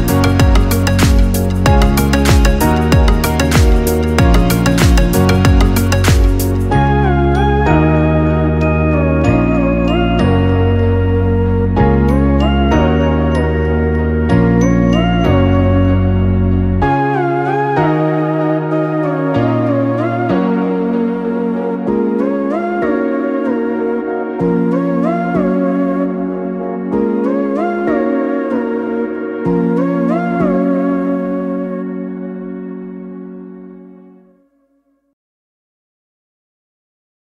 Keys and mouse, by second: 0.7 click, 1.5 shift+click, 2.1-3.9 right drag, 3.9 click, 4.8 g, 8.8 shift+click, 9.9 j, 10.8-13.6 right drag, 13.6-16.8 drag, 17.6 g, 20.7 click, 21.6 g, 25.0 click, 25.9 g, 28.8 click, 29.6 g, 33.7 click, 34.5 shift+click, 35.3-37.2 right drag.